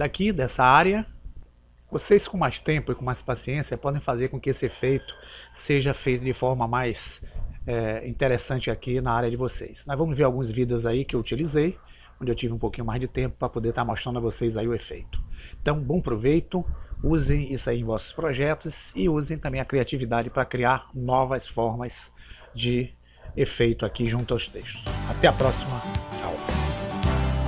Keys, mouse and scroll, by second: 0.0 Escape.